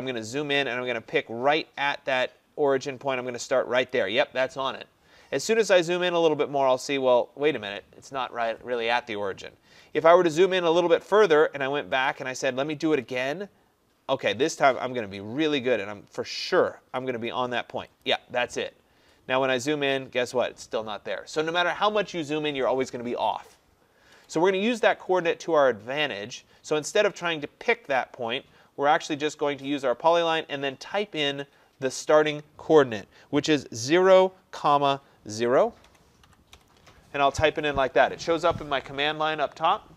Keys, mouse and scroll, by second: 3.9 click, 5.4-6.6 scroll, 9.7 Escape, 10.2-10.8 scroll, 10.8 middle click, 12.1 click, 18.1 click, 19.2-19.8 scroll, 24.2 Escape, 25.2-27.5 scroll down 36, 27.5 scroll, 29.9 click, 35.9-36.6 typing.